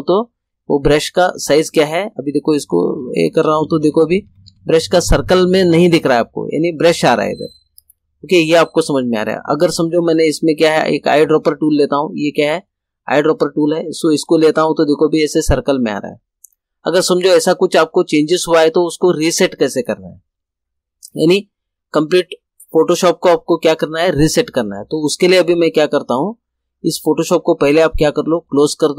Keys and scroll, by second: 3.1 ].